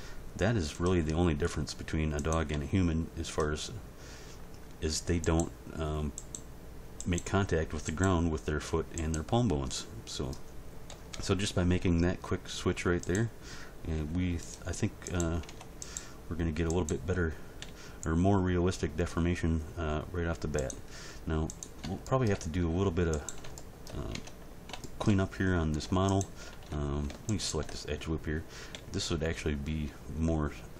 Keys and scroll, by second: 2.5 g, 10.9 End, 11.1 Page_Down, 13.9 g, 15.5 Tab, 17.6 g, 24.1 Tab, 28.7 g.